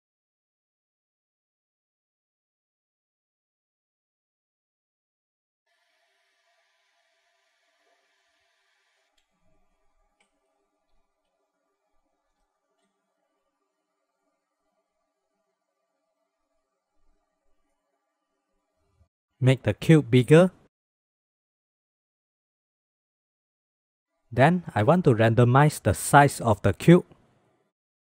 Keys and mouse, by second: 0.7 shift+middle click, 1.6 shift+middle drag, 3.2 click, 3.6 click, 3.8 click, 4.7 click, 5.1 click, 5.5-7.6 drag, 8.1-9.2 drag, 9.8-13.1 drag, 14.8 click, 15.2 click, 15.9 click, 16.7 click, 18.6 ctrl+s, 18.7 KP_0, 19.9 click, 20.4-21.8 drag, 21.8 ctrl+z, 23.6 click, 26.5 click, 27.5 shift+a.